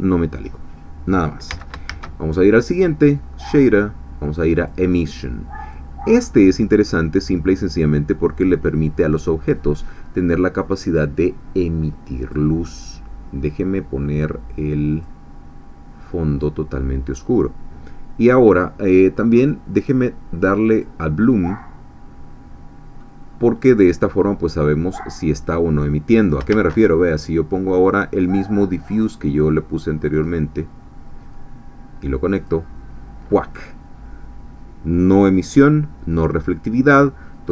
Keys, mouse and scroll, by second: 1.5 x, 1.9 shift+a, 4.5 click, 5.6 click, 6.5-8.1 middle drag, 8.1-9.4 drag, 10.1 scroll down 1, 12.3 click, 14.9 click, 15.8-16.5 scroll down 1, 19.4 click, 20.8 click, 23.7 scroll up 2, 24.2 scroll down 1, 25.8 click, 26.5 shift+a, 28.9 click, 30.1 click, 31.3-32.7 drag.